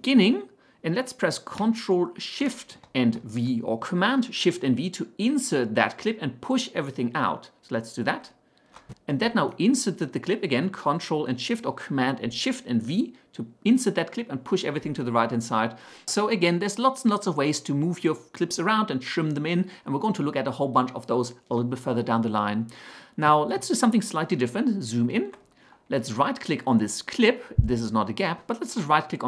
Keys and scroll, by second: 8.1 ctrl+shift+v.